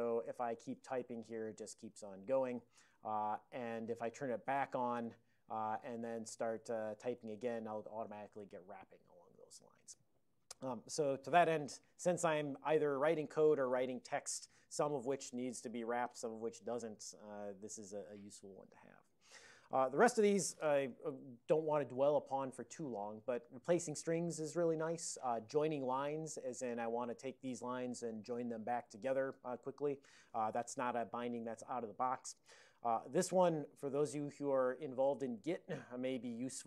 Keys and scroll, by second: 0.0-3.7 typing, 4.5 ctrl+c, 5.0 l, 6.6-8.8 typing, 21.1 ctrl+l, 26.1 ctrl+p, 26.2 ctrl+p, 26.4 ctrl+p, 26.5 ctrl+p, 28.0 alt+j, 28.3 alt+j, 28.8 alt+j.